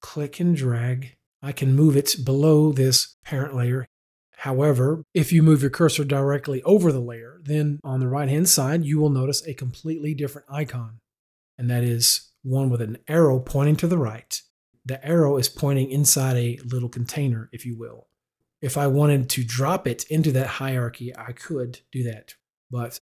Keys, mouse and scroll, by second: 0.2 click.